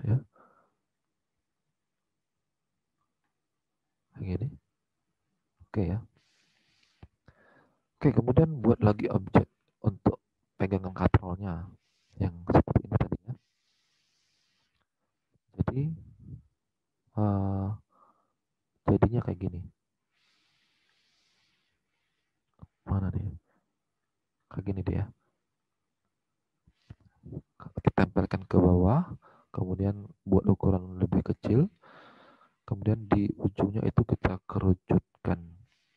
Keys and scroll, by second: 5.8 alt+Tab, 35.4 alt+Tab.